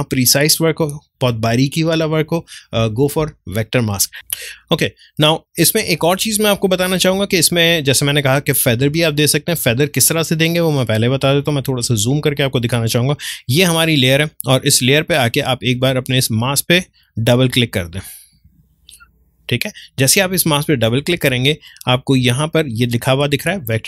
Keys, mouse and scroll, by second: 4.1 click, 4.3 ctrl+space, 4.5 ctrl+click, 4.7 ctrl+space, 6.7-9.7 ctrl+drag, 9.7 space, 9.9-13.3 ctrl+drag, 15.7 click.